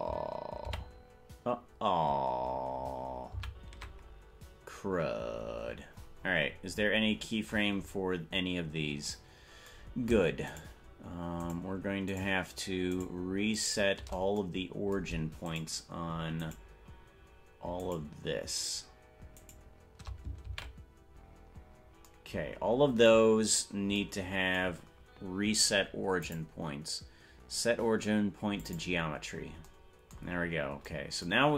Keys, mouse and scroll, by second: 1.9 ctrl+z, 4.5 ctrl+z, 5.7-7.3 scroll down 33, 7.1 scroll up 1, 7.3 scroll down 1, 7.7-8.3 scroll up 15, 8.8 scroll up 5, 10.8 shift+right click, 11.8 shift+right click, 12.4 shift+right click, 13.2 shift+right click, 13.8 shift+right click, 15.8 shift+right click, 16.8 shift+right click, 18.2 shift+right click, 19.8 shift+right click, 21.8 ctrl+z, 26.3-28.9 drag, 30.6-31.0 scroll up 4.